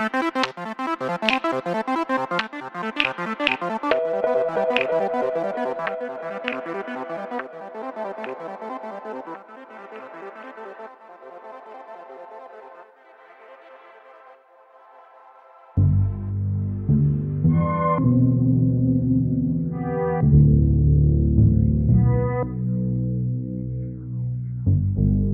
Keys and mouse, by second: 0.2 click, 1.5 e, 2.0 click, 2.4 s, 3.2 click, 4.6 ctrl+space, 7.3-8.3 drag, 10.5 g, 11.2 click, 12.9 e, 14.9 ctrl+KP_Add, 17.5 l, 18.5 g, 19.3 click, 22.4 e, 24.6 e.